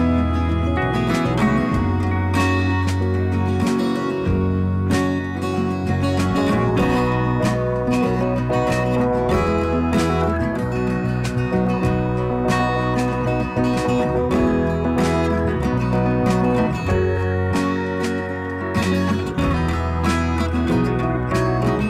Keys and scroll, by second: 10.2 d, 11.3 s, 13.0 ctrl+shift+a, 19.9 d, 21.0-21.8 typing.